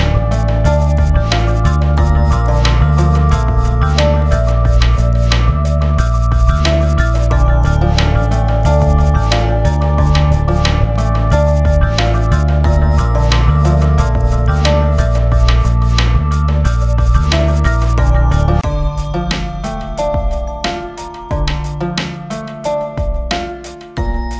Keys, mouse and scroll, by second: 1.2 scroll up 1, 1.7-13.0 drag, 13.0-16.4 drag, 16.4-21.0 drag, 21.0-23.0 right drag, 23.0-24.3 drag.